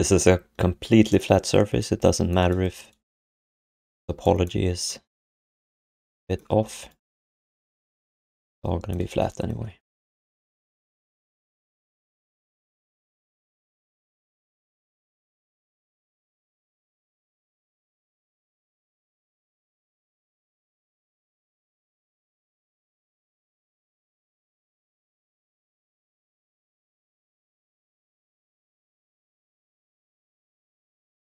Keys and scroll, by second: 6.5 q, 7.1 alt+shift+d, 7.3 3, 9.6-11.8 typing, 12.7 ctrl+shift+d, 17.4-18.3 typing, 19.0 ctrl+shift+d, 20.7 Tab, 20.9 Tab, 24.1 d, 26.2 q, 28.5 r, 30.5 q.